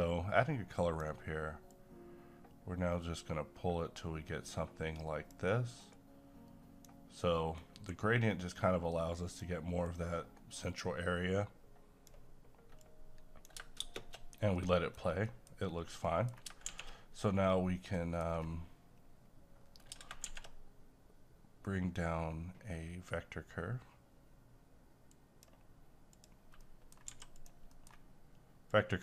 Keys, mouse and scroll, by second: 7.6 q, 9.9-13.8 drag, 13.8 space, 14.5 middle click, 14.9-15.2 scroll down 1, 15.2 middle click, 15.6-16.0 scroll up 1, 16.0 middle click, 16.6 shift+a, 17.9 middle click, 18.3-19.4 scroll down 1, 20.2 shift+a, 25.1 click, 26.6 middle click, 27.1 g, 27.3 click, 27.7 middle click, 28.7-29.0 drag.